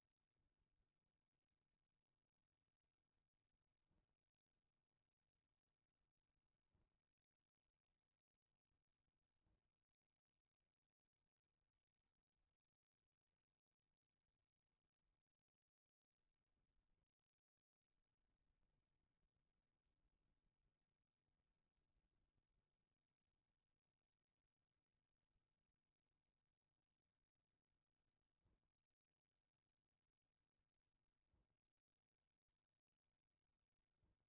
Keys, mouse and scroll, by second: 1.2 click, 2.5-3.5 drag, 4.8-5.2 shift+middle drag, 5.7 Tab, 8.4-10.9 middle drag, 18.2 click, 21.3 Tab, 26.0 click, 26.7 click, 32.5 click, 33.6 click.